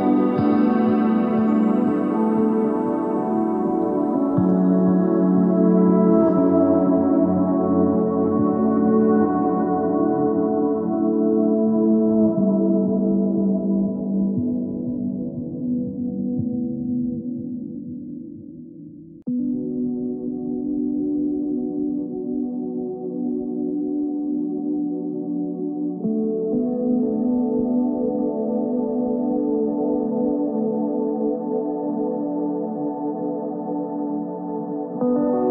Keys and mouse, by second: 3.5 KP_3, 4.2 ctrl+Tab, 5.0 click, 5.1 z, 5.3 c, 7.1 s, 10.2 z, 11.1 Tab, 12.7 Tab, 13.7 ctrl+Tab, 15.7 KP_3, 16.2 ctrl+Tab, 17.4 z, 17.7 c, 19.4 s, 22.4 z, 25.0 ctrl+Tab, 25.7-27.1 drag, 33.9 e, 35.0 s.